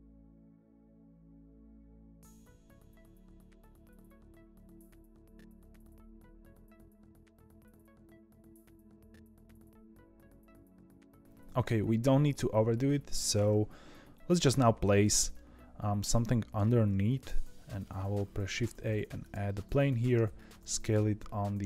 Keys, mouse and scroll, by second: 0.0 click, 0.2 ctrl+b, 1.6 ctrl+t, 1.8 2, 2.0 click, 2.2 g, 2.8 middle click, 2.9 2, 3.1 click, 3.2 shift+click, 3.3 middle click, 3.5 ctrl+b, 4.2 1, 4.6 click, 4.7 g, 5.4 middle click, 5.5 2, 5.6 click, 5.7 middle click, 5.9 ctrl+b, 6.7 1, 6.8 click, 7.0 g, 7.5 click, 7.6 middle click, 7.7 ctrl+b, 8.1 1, 8.3 click, 8.4 g, 8.9 click, 9.3 ctrl+t, 9.4 click, 9.9-11.0 middle drag, 13.1 Tab, 13.6-15.3 scroll down 2, 15.3-16.9 middle drag, 16.9 shift+a, 19.7 Tab, 20.0 s.